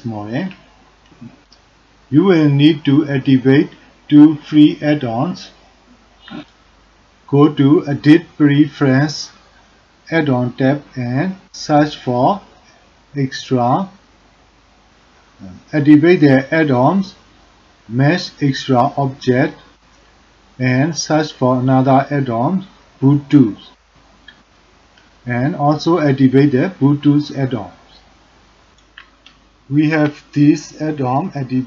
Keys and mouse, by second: 7.3-10.0 drag, 29.9-31.6 drag.